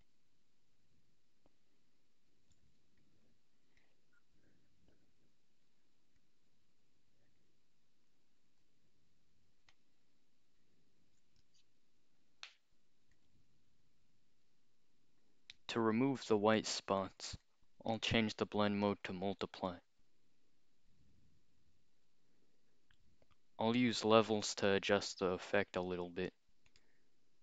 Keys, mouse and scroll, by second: 3.0 click, 3.5 scroll up 2, 3.8-5.6 drag, 6.2-8.0 drag, 9.7-11.1 alt+shift+drag, 13.1 click, 13.7 click, 17.5 click, 18.9 click, 24.5 click, 24.9-25.8 scroll up 2, 25.8 click, 26.7 right click.